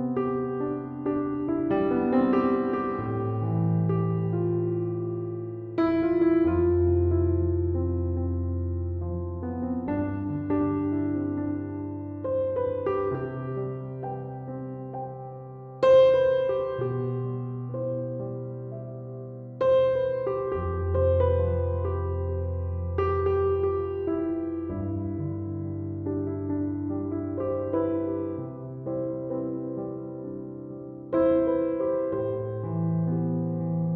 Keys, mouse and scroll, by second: 10.7 Escape, 18.3 Escape, 25.6 5, 26.8 Return.